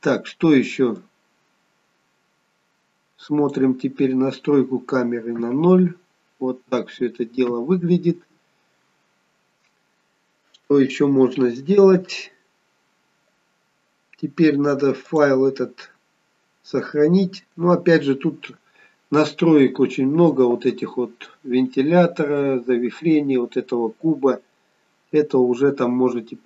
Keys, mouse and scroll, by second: 1.1 click, 5.4 KP_0, 7.5 KP_0, 15.1 click.